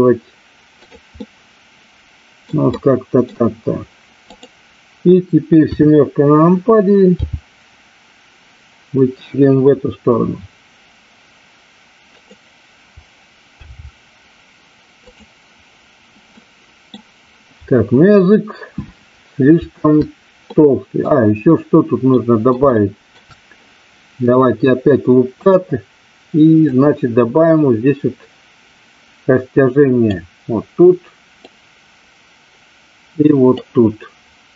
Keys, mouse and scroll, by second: 0.8 click, 1.2-2.4 middle drag, 2.7 middle click, 4.2 click, 5.6 KP_7, 7.0 g, 12.2 click, 13.6 g, 16.3 middle click, 20.6 middle click, 22.0 middle click, 22.7 shift+middle click, 26.7-30.0 drag, 31.4-33.6 drag.